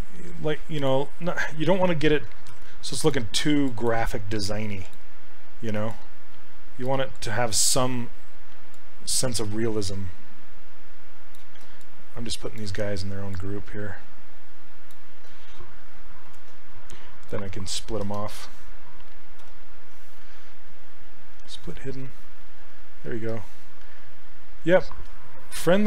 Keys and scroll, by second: 2.6 shift+f, 16.3 ctrl+w, 19.4 2.